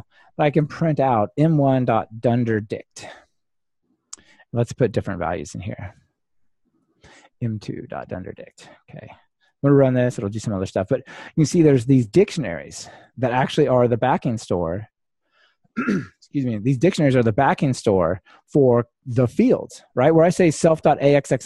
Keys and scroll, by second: 2.8 Return, 4.0 super+d, 9.6 ctrl+r, 13.8 super+F2.